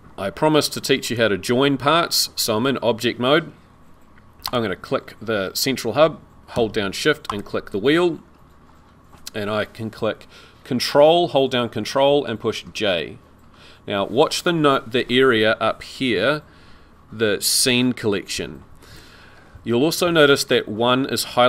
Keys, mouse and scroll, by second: 1.0 Tab, 1.1 click, 1.7-2.2 scroll down 1, 2.2 scroll down 1, 4.5 click, 7.3 shift+click, 8.2 scroll down 2, 20.0-20.3 scroll up 3.